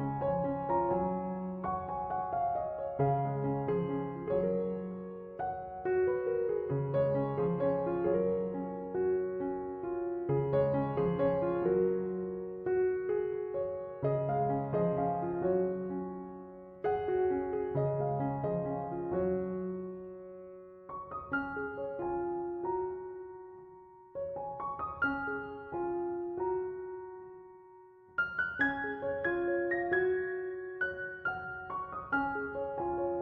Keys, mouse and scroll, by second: 26.8 Escape.